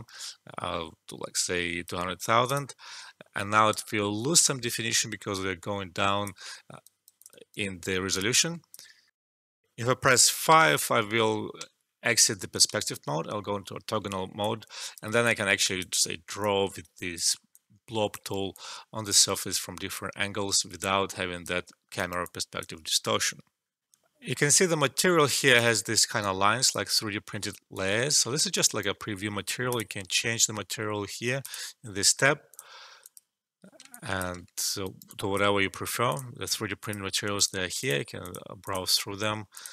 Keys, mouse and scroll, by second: 4.4-6.5 alt+drag, 6.5 alt+middle click, 6.8 alt+right click, 7.1 alt+click, 7.3 alt+right click, 7.7 alt+middle click, 8.0 alt+click, 8.8 alt+middle click, 9.1 alt+F12, 14.4 alt+click, 15.2 shift+click, 16.4 alt+click, 17.5 click, 18.5 alt+click, 19.3 click, 20.5 alt+click, 21.6 alt+middle click, 21.9 alt+right click, 22.2-23.8 alt+drag, 23.8 alt+F12, 24.5 alt+right click, 25.7 alt+middle click, 26.1 alt+click, 26.9 alt+middle click, 27.7 alt+click, 28.4 alt+middle click, 28.6 alt+right click, 29.7 click, 33.8 alt+click, 34.4 alt+middle click, 34.8 alt+right click, 35.0 alt+click.